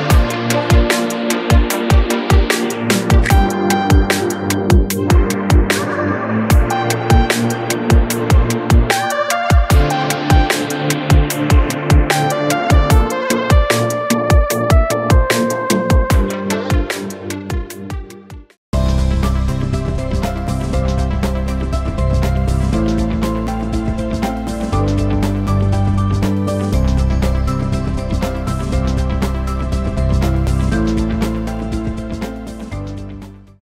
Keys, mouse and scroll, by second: 4.0 click, 7.5 click, 12.0 ctrl+=, 16.2 click.